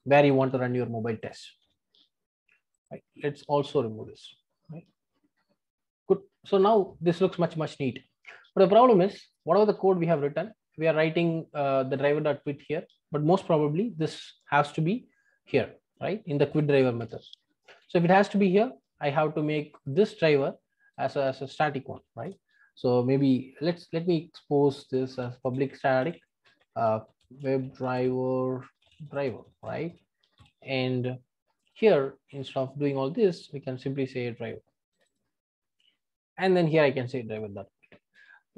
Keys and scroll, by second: 0.4 super+v, 13.9 super+x, 17.6 super+v, 33.6 Delete.